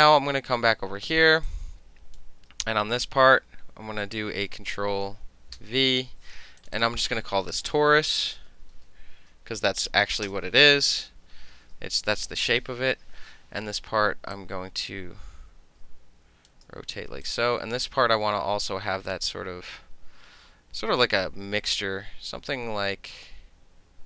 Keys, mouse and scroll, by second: 0.8 space, 1.5 click, 5.7 ctrl+v, 6.7 click, 6.8 click, 8.1-9.9 typing, 12.9 ctrl+=, 13.5 middle click, 14.4-16.6 drag, 16.6 shift+middle click, 17.3 click, 20.4-24.0 drag.